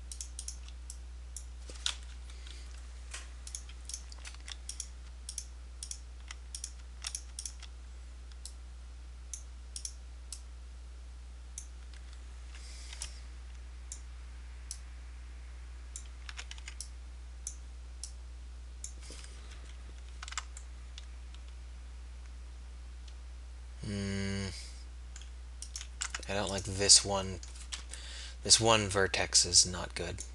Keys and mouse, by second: 2.2 KP_1, 3.6 right click, 12.6 a, 13.1 b, 16.4 a, 17.6 b, 19.6 KP_3, 20.4 Tab, 26.0 Tab, 27.9 KP_1.